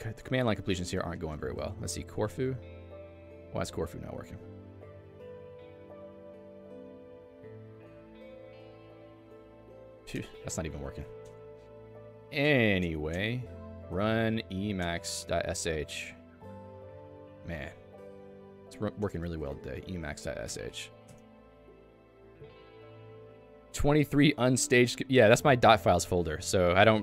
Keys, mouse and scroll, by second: 0.3 BackSpace, 0.7 BackSpace, 3.4 Return, 5.8 ', 6.4 BackSpace, 7.4 ., 7.5 /, 9.3 Tab, 10.3 ctrl+g, 10.8 Escape, 11.5 a, 11.8 Escape, 12.4 Escape, 12.5 a, 15.1 BackSpace, 16.4-20.2 typing, 21.1 Return.